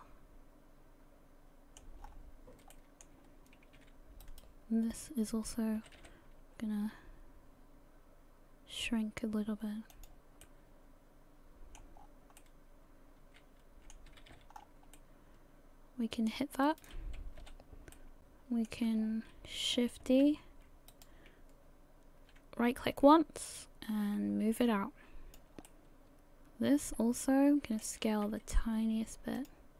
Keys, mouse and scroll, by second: 2.0-2.6 scroll up 5, 2.7 shift+middle click, 3.3 scroll up 1, 4.2 alt+right click, 6.3 g, 10.4 middle click, 12.0-12.4 scroll down 5, 12.4 middle click, 14.1 a, 14.3 a, 14.5 scroll up 4, 15.0 middle click, 16.7 right click, 17.4 l, 17.9 middle click, 19.0 scroll down 3, 20.3 shift+d, 23.5 click, 25.7 middle click, 28.3 s.